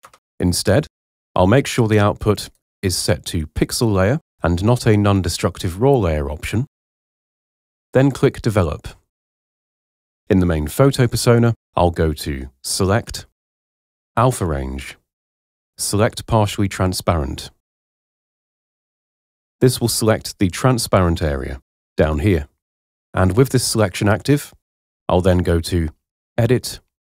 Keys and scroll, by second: 0.0 Return.